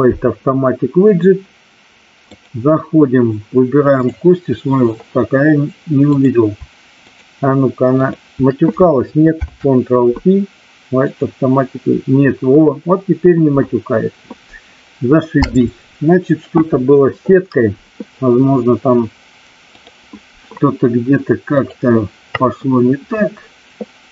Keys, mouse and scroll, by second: 3.9-4.9 drag, 6.1 click, 6.9 shift+click, 7.9 shift+click, 9.5 ctrl+p, 19.7 click, 21.7-24.1 drag.